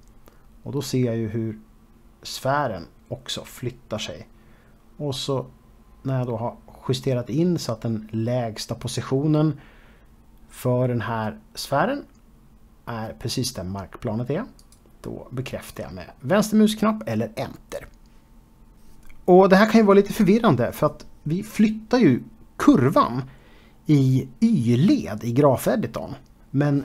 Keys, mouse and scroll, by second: 14.2 shift+click.